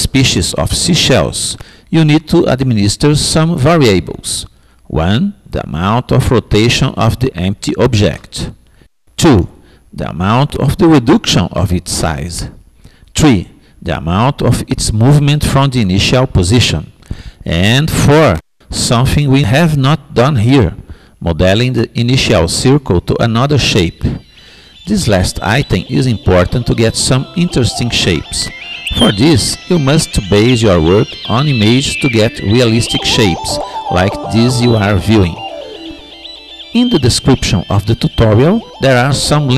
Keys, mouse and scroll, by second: 0.0-1.7 drag.